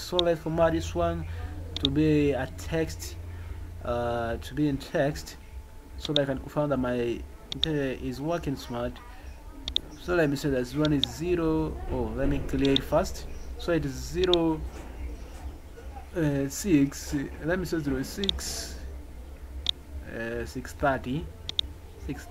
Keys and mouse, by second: 6.0 click, 9.6 click, 10.9 click, 12.7 click, 14.2 click, 18.3 click, 19.6 click, 21.4 click, 21.6 click.